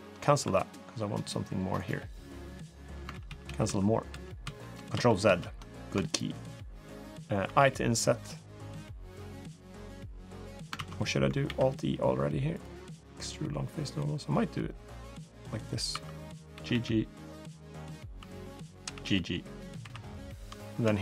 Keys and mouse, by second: 0.2 3, 0.5 click, 1.5 shift+click, 2.3 shift+click, 2.9-3.2 ctrl+z, 3.4 ctrl+z, 3.8 ctrl+z, 4.2 ctrl+z, 4.7 ctrl+z, 5.0 ctrl+z, 5.5 click, 5.8 shift+click, 6.1 shift+click, 7.2 i, 10.5 ctrl+z, 11.2 alt+e, 15.7 2, 16.0 click, 16.3 g, 17.9 2, 18.6 g, 19.6 3, 19.8 click, 20.4 click.